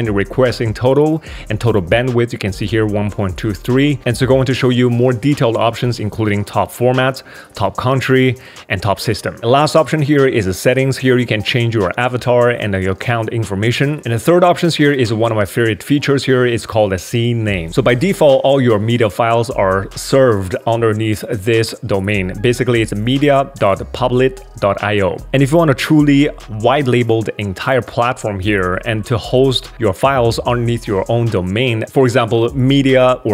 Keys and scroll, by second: 9.4 super+w.